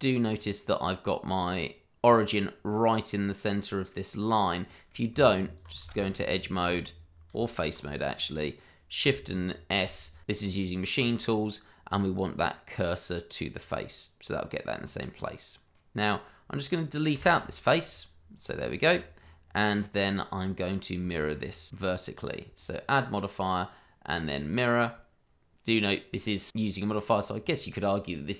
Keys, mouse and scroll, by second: 0.3 click, 0.6-1.9 scroll up 1, 1.9 click, 2.0 scroll up 1, 4.3 scroll down 1, 4.6 middle click, 5.1 click, 5.6 Tab, 6.3 alt+click, 6.5 click, 7.3 Tab, 7.9 click, 9.7 shift+s, 13.6 click, 14.8 scroll down 1, 15.7 middle click, 17.1 Delete, 17.9 click, 20.0 click, 21.1 shift+middle click, 21.4 scroll up 1, 21.9 shift+middle click, 22.0 middle click, 22.1 shift+middle click, 22.8 click.